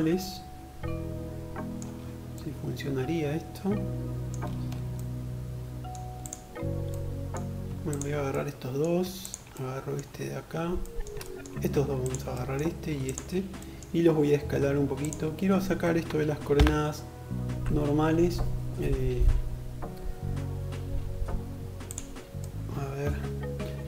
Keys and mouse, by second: 5.2 click, 5.3-6.8 middle drag, 6.8 shift+click, 6.9-8.2 shift+middle drag, 8.2 shift+click, 8.3-11.0 shift+middle drag, 11.0 click, 11.1 middle click, 11.9 shift+click, 12.0-14.0 shift+middle drag, 14.0-23.8 drag.